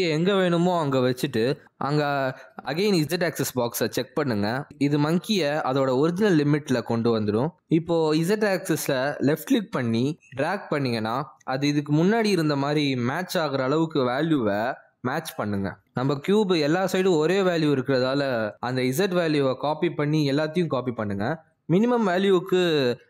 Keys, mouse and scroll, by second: 0.4 click, 1.9 g, 3.2-3.6 scroll down 5, 3.6 g, 5.2 scroll down 2, 5.5-6.7 scroll up 6, 6.1 middle click, 6.7 g, 7.8 middle click, 8.9 g, 9.4 middle click, 10.4 click, 10.8 middle click, 11.2 scroll up 1, 11.5 shift+middle click, 12.4 click, 12.8 click, 20.2 middle click, 21.7 ctrl+c.